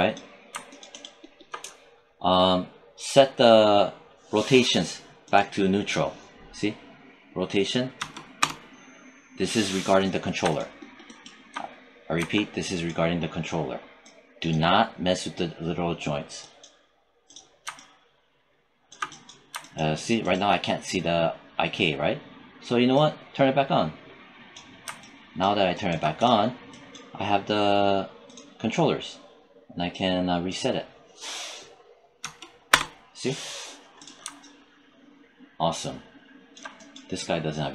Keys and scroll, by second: 7.8 0, 8.2 Return, 32.1 0, 32.6 Return.